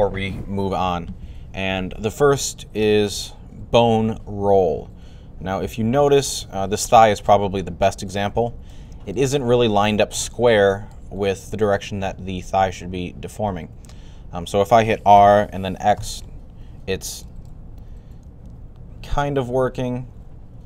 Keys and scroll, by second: 15.0-16.3 typing.